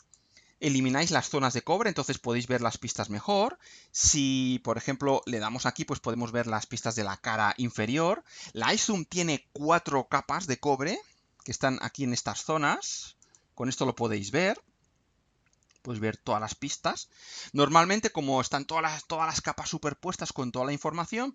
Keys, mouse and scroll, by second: 2.1-2.7 scroll up 1, 2.7 scroll down 1, 5.1 click, 6.1 scroll down 1, 6.9 scroll up 1, 12.3 click, 13.2 click, 14.5-14.9 scroll down 2, 16.9-17.3 scroll up 2, 19.4 scroll down 2.